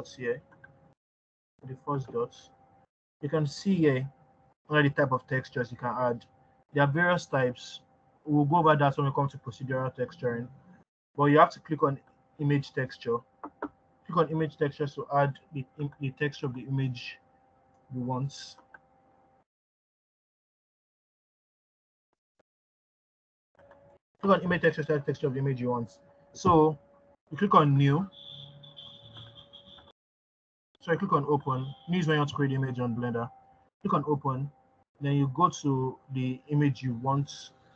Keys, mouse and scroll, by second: 1.5-15.2 drag, 30.1 click, 32.7 click.